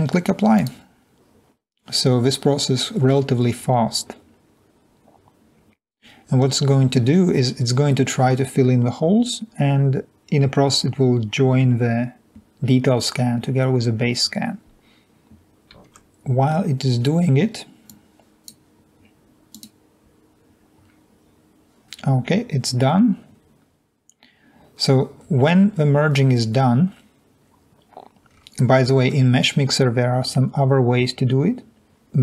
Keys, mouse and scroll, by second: 20.3 click, 24.0-24.9 scroll down 3, 25.9-28.8 scroll down 2.